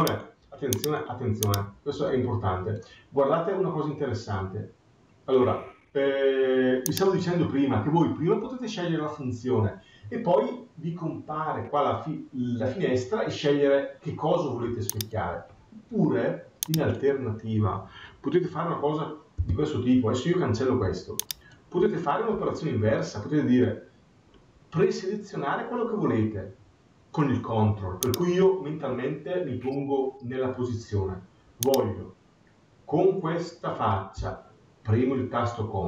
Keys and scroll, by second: 19.3 Delete.